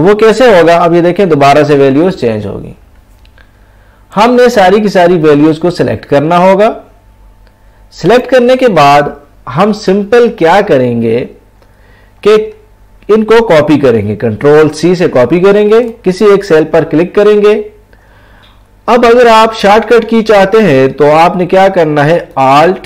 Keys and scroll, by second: 14.6 ctrl+c.